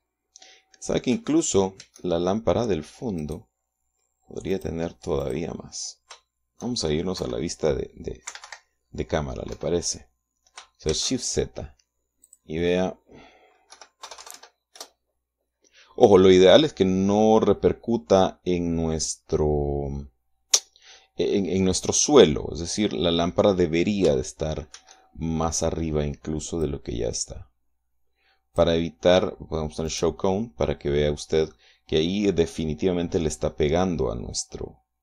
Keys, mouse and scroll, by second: 2.2 shift+z, 2.6 shift+middle click, 2.9 shift+click, 3.6 right click, 5.0 click, 5.7 click, 7.6 KP_0, 8.7 Escape, 10.0 KP_0, 11.4 shift+z, 12.7 click, 14.2 KP_1, 14.5 KP_0, 15.2 KP_Enter, 22.5-23.8 drag, 25.2 shift+z, 27.1-29.2 drag, 30.4 click, 31.2-32.2 middle drag.